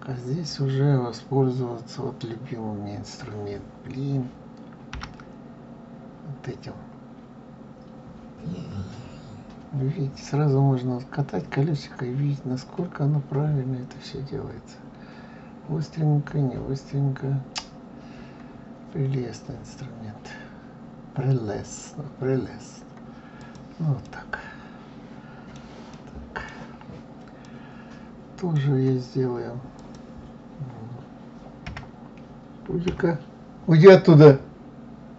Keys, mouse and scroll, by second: 4.9 g, 24.0-29.7 middle drag, 29.7 click, 31.6 KP_1, 32.8 KP_3.